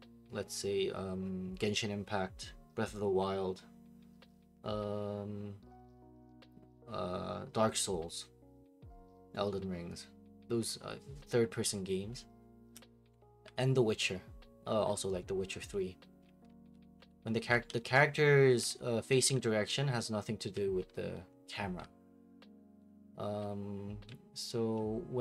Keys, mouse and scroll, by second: 13.1 s, 16.0-22.1 typing, 23.8-24.6 typing.